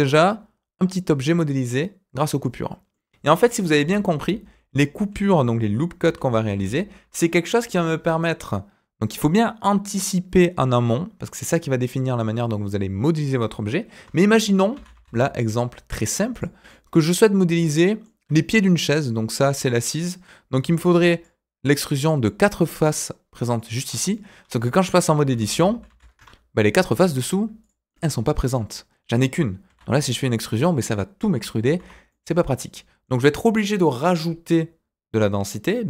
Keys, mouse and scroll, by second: 3.8 ctrl+z, 4.1 ctrl+z, 4.4 ctrl+z, 4.8 ctrl+z, 5.2 ctrl+z, 5.6 ctrl+z, 6.0 ctrl+z, 6.5 ctrl+z, 14.0 Tab, 14.3-14.7 scroll down 1, 14.7 s, 16.6-18.0 middle drag, 20.6-23.8 typing, 20.9 click, 21.9 click, 22.6 click, 23.5 click, 24.1 middle click, 25.2 ctrl+z, 25.3 ctrl+z, 25.5 ctrl+z, 25.9 ctrl+z, 26.1 Tab, 27.2 click, 27.6 click, 27.8-29.1 middle drag, 29.6 e, 31.6 ctrl+z, 32.1 middle click.